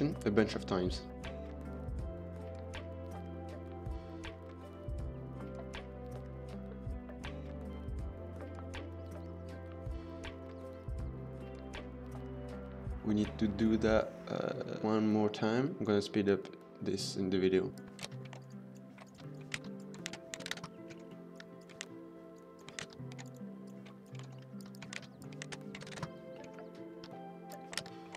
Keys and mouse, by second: 0.1-0.4 middle drag, 1.2-4.4 typing, 2.3 Tab, 2.5 Tab, 2.5 click, 2.7 Tab, 2.7 click, 3.1 Tab, 3.2 click, 4.2 KP_Enter, 4.6 shift+middle click, 5.7 middle click, 5.9 middle click, 6.2 middle click, 6.4 click, 6.5 middle click, 6.7 Tab, 6.8 click, 8.0 click, 8.3 shift+s, 8.5 Tab, 9.0 shift+d, 9.7 middle click, 10.1-12.6 typing, 10.3 click, 10.5 Tab, 10.5 click, 10.9 Tab, 11.1 drag, 11.2 shift+click, 12.1 KP_Enter, 12.4 middle click, 17.7 Tab, 18.0-20.5 typing, 19.1 Tab, 19.3 drag, 19.6 Tab, 20.6 KP_Enter, 20.9 shift+middle drag, 21.3 Tab, 21.6 click, 21.8-23.8 typing, 22.9 Tab, 24.2 shift+middle click, 24.6 Tab, 24.9-26.0 typing, 25.0 Tab, 25.2 click, 26.0 KP_Enter, 27.0 Tab, 27.5 click, 27.7 shift+s, 27.8 Tab, 28.1 shift+d.